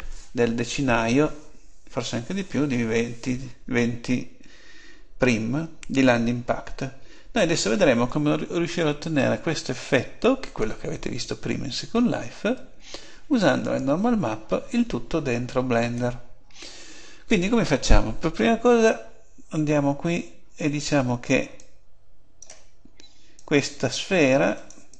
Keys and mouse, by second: 7.0 Tab, 21.5-24.9 drag.